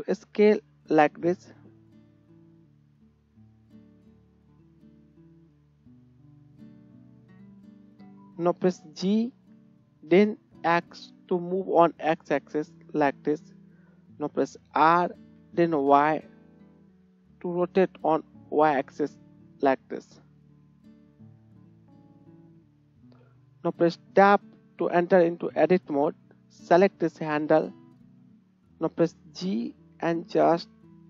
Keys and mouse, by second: 3.2 s, 5.5 shift+click, 5.8-26.1 shift+right drag, 8.9 g, 14.2 r, 24.0 Tab, 24.1 Tab, 26.1-29.7 drag, 29.1 g, 29.7-31.0 right drag.